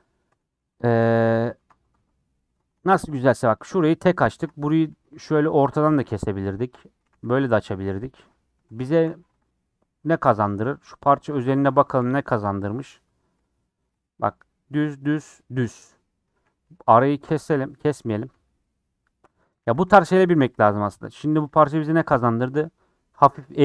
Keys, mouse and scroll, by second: 0.3 Tab, 0.6 ctrl+z, 1.0 ctrl+z, 1.4 ctrl+z, 1.9 Tab, 2.4 Tab, 2.8 shift+middle click, 3.0-3.4 scroll up 5, 3.5 click, 3.7-4.7 middle drag, 4.7 scroll up 1, 4.9 2, 5.4 click, 5.7-6.7 middle drag, 6.7 shift+click, 7.0 a, 7.4 u, 8.3 middle click, 9.2 3, 9.3 click, 10.6 l, 11.3-12.4 middle drag, 12.7 middle click, 13.3 l, 16.0 middle click, 16.6 2, 16.7-17.8 middle drag, 17.8 click, 18.0-19.1 middle drag, 19.1 shift+click, 19.6 4, 19.8 u, 20.9 3, 21.3 click, 22.0 l.